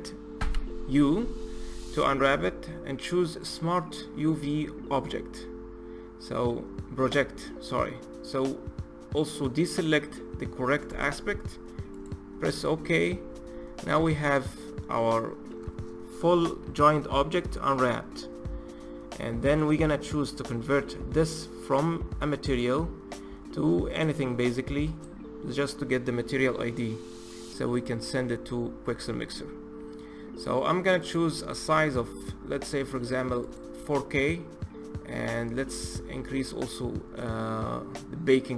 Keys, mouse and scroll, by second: 0.1 u, 13.6 a, 19.2-26.3 drag, 26.3-33.2 middle drag, 33.2-38.5 drag.